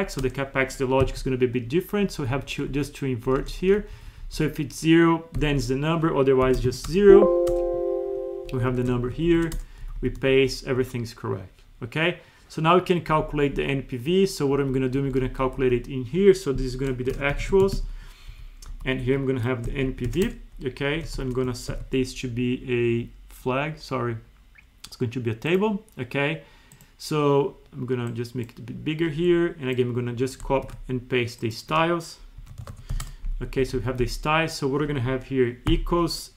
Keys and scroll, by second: 1.1 F2, 2.0 Left, 3.8 Right, 8.5 Up, 8.7 ctrl+c, 9.0 ctrl+shift+Right, 9.8 Left, 10.2 Right, 13.1 Left, 14.6 Right, 15.0 Up, 15.6 Left, 18.3 Right, 18.7 Left, 19.0 Right, 20.9 Up, 21.7 alt+2, 30.6 ctrl+c, 32.4 Up, 33.5 Escape, 33.7 Right, 34.0 Down.